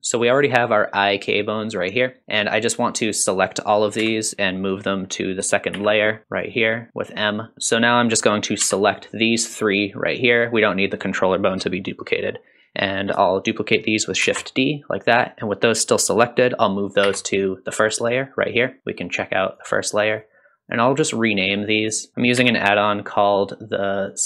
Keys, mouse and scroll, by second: 2.2 click, 4.0 a, 5.7 m, 7.5 click, 8.2 click, 8.6 c, 14.2 shift+d, 17.0 m, 19.6 click, 20.1 click, 20.7 click, 22.4 n, 24.1 click.